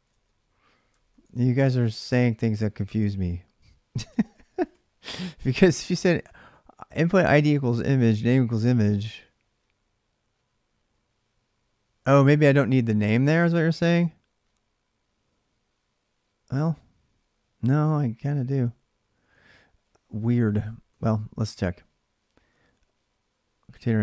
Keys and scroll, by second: 0.9 alt+Tab, 0.9 ctrl+a, 1.1 ctrl+a, 1.9 ctrl+[, 2.0 ctrl+j, 2.1 k, 3.9-7.6 typing, 7.5 Return, 12.1 ctrl+a, 12.2 ctrl+a, 19.2 ctrl+a, 19.2 ctrl+[, 19.4 typing, 20.7 typing, 22.3 typing, 23.9-24.0 typing.